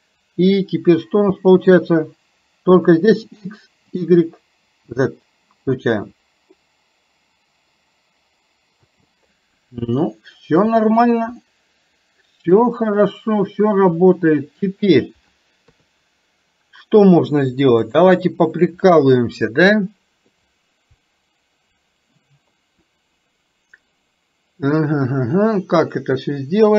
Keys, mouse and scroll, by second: 1.4 space, 3.3 click, 3.9 click, 8.8 space, 10.1-10.7 shift+middle drag, 11.6-12.7 middle drag, 15.7 KP_3, 17.9 click, 25.8-26.7 middle drag.